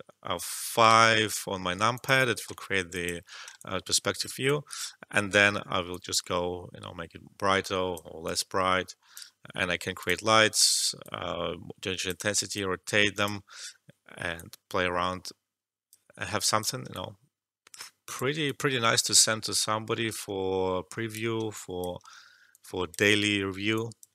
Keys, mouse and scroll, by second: 1.8 alt+click, 2.6 alt+middle click, 2.9 alt+click, 3.5-9.9 alt+drag, 16.9-18.4 alt+drag, 18.4 alt+click, 19.5 alt+middle click, 20.1-21.5 alt+drag, 22.1 alt+middle click, 22.5 alt+click, 23.2 alt+middle click, 23.7 alt+click.